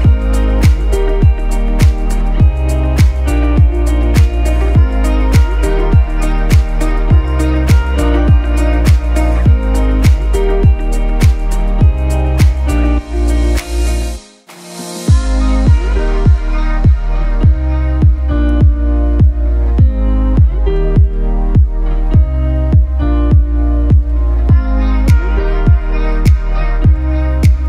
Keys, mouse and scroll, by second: 0.9 ctrl+z, 1.2 click, 1.6 scroll up 1, 1.9-2.5 typing, 2.2 click, 2.9 scroll down 1, 3.4 click, 3.4 click, 5.2 right click, 6.2 click, 7.1-8.1 scroll down 1, 8.8 click, 11.9 click, 15.7 click, 16.6-17.8 typing, 17.7 click, 18.1 click, 21.6-24.2 alt+shift+drag, 25.6 scroll down 1, 27.0 click.